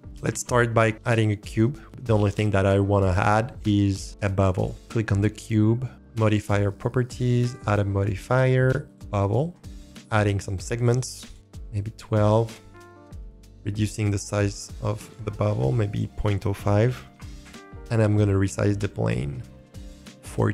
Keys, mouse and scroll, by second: 0.0 click, 0.2 shift+a, 4.5 click, 6.2 click, 7.3-8.9 drag, 9.4-9.8 scroll up 3, 9.6 shift+middle click, 10.7 click, 10.9 click, 11.0 click, 11.2 click, 13.0 click, 13.1 middle click, 13.7-17.2 drag, 17.6 scroll down 2, 18.6 middle click.